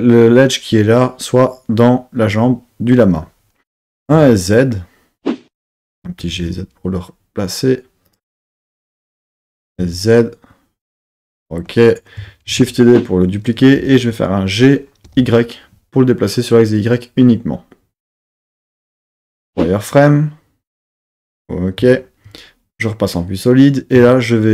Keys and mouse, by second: 4.0 s, 4.1 z, 5.6 click, 6.1 g, 6.3 z, 8.1 click, 9.6 s, 9.8 z, 11.3 click, 12.5 shift+d, 13.7 g, 15.1 y, 18.9 click, 19.0 z, 21.8 z, 24.0 Tab.